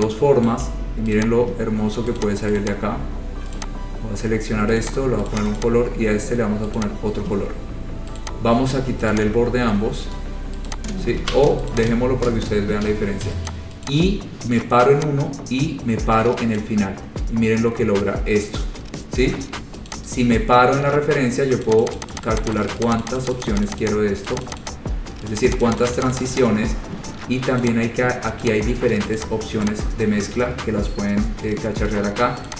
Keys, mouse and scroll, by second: 0.7 shift+click, 0.9 shift+click, 1.4 click, 2.4 click, 2.8 click, 3.8 click, 5.0 click, 5.6 click, 5.8 click, 7.0 click, 7.6-8.4 scroll, 8.4 click, 9.4 shift+click, 10.4 right click, 10.9 click, 11.4 ctrl+z, 11.9 click, 12.6 scroll, 13.7 click, 14.0 click, 14.2 shift+click, 16.8 click, 17.6-17.9 scroll, 20.1 click, 21.9 click, 22.0 click, 22.2 click, 22.3 click, 22.5 click, 22.6 click, 22.9 click, 23.1 click, 23.3 click, 23.4 click, 23.6 click, 23.7 click, 23.9 click, 24.1 click, 24.5 click, 24.6 click, 24.8 click, 25.6 click, 25.7 click, 25.9 click, 26.1 click, 26.2 click, 26.3 click, 26.5 click, 27.8 click, 28.6 click, 29.4 click, 29.9 click.